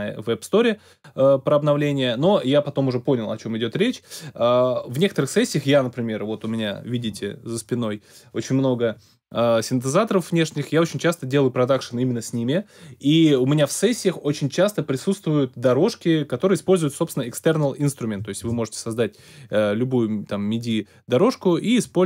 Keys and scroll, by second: 18.4 alt+super+s.